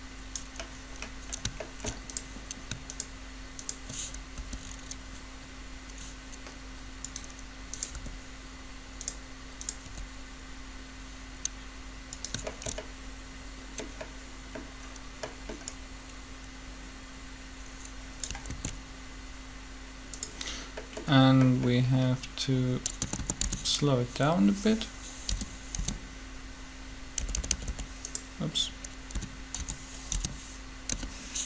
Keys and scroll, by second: 4.3 shift+r, 7.9 r, 9.8 r, 18.5 alt+a, 22.9-23.4 typing, 25.0-25.8 typing, 26.9-27.7 typing, 28.9-31.4 typing.